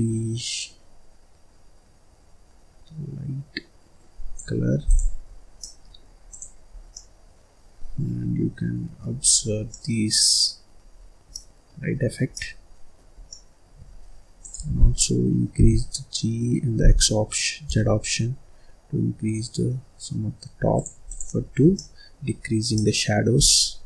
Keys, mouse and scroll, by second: 4.8 click, 5.2-5.6 scroll up 4, 5.6 middle click, 6.2 click, 6.7 scroll down 2, 6.9-9.2 middle drag, 9.2-9.6 scroll down 4, 9.6-10.9 middle drag, 10.9-11.2 scroll up 3, 11.2 middle click, 11.8-12.2 scroll up 3, 12.2 middle click, 13.1 scroll down 2, 13.2-14.3 middle drag, 14.3 click, 15.4 g, 21.0 click, 21.4-21.7 scroll down 6, 21.7 middle click, 22.4-22.7 scroll up 4, 22.7 middle click, 23.4 scroll down 3, 23.5 middle click.